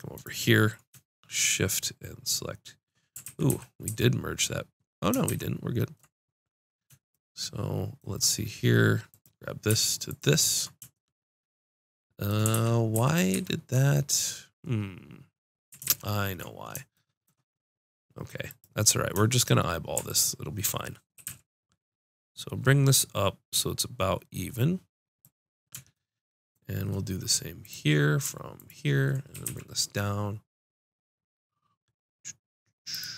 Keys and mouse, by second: 3.2 ctrl+z, 3.4 ctrl+z, 3.8 ctrl+z, 5.2 ctrl+shift+z, 8.7 click, 9.1-10.5 drag, 10.9 click, 11.1 click, 12.5 ctrl+z, 12.9 ctrl+z, 13.3 ctrl+z, 15.8 ctrl+shift+z, 17.5-18.5 drag, 19.0-21.7 drag, 21.1 g, 25.7-27.6 drag, 28.5 click, 29.3 g.